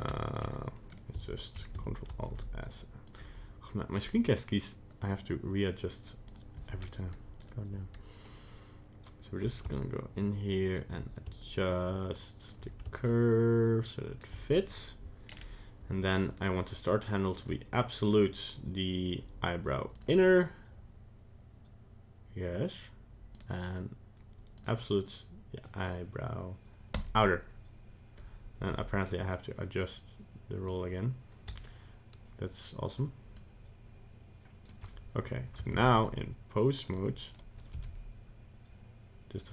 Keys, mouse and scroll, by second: 6.3 click, 6.8-7.4 scroll up 2, 7.4 right click, 9.7 shift+click, 11.4 shift+click, 13.1 shift+click, 15.2-15.6 scroll down 4, 16.3 click, 18.0 click, 23.3 click, 25.0 click, 28.8 click, 31.5 shift+click, 33.3 shift+click, 35.7 ctrl+Tab, 37.3 right click, 37.7 g.